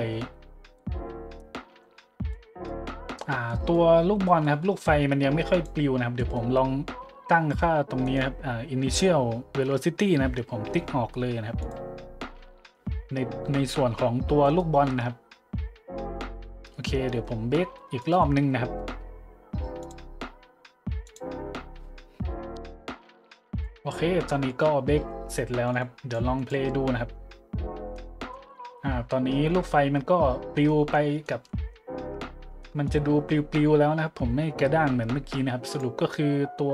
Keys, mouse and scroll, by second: 0.7 middle click, 2.3-2.6 drag, 3.5-3.8 drag, 4.4 click, 5.5 click, 6.2-6.5 middle drag, 8.0 right click, 11.6-11.9 drag, 14.4 right click, 16.5 middle click, 16.9 middle click, 18.0 right click, 18.5-19.1 scroll down 3, 19.8-20.2 drag, 21.0 click, 25.7 click, 26.3 click, 27.9-28.3 drag, 30.7-31.2 middle drag, 31.5-31.8 middle drag, 32.6-32.9 middle drag, 35.6-36.0 drag.